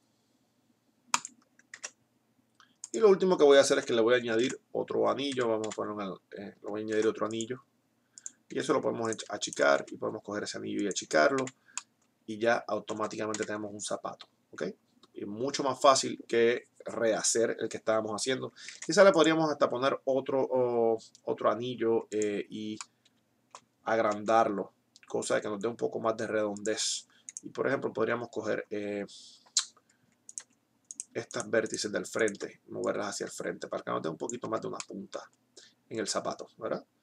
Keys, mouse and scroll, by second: 2.1 ctrl+Tab, 4.7 ctrl+r, 5.9 z, 7.2 ctrl+r, 8.9 s, 9.6 s, 11.1 Tab, 11.6 z, 13.6 Tab, 13.6 KP_3, 18.9 ctrl+r, 24.2 s, 27.6-28.6 drag, 27.6-29.4 right drag, 30.4-32.7 right drag, 32.7-34.1 middle drag, 34.1 click, 34.6 Tab.